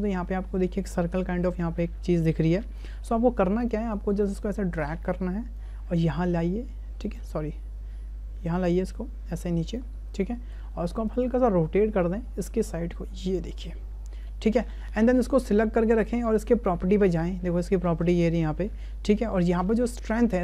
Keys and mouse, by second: 0.0-0.7 drag, 1.6-3.0 drag, 4.2 shift+click, 4.8 click, 6.1-7.2 drag, 8.6-9.8 middle drag, 10.4 shift+middle click, 12.1-13.5 middle drag, 13.5 click, 20.2-20.4 middle drag.